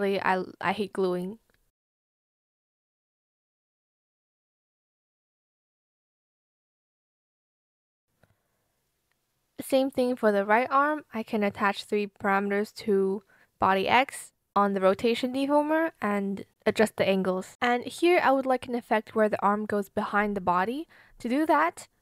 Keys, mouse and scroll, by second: 3.0 shift+click, 3.2 shift+click, 3.4 shift+click, 3.6 shift+click, 4.6 shift+click, 5.2 shift+click, 6.0 shift+click, 6.7 shift+click, 7.3 shift+click, 7.5 shift+click, 7.6 shift+click, 7.8 shift+click, 8.3 ctrl+z, 8.5 shift+click, 9.7 shift+click, 10.1 Return.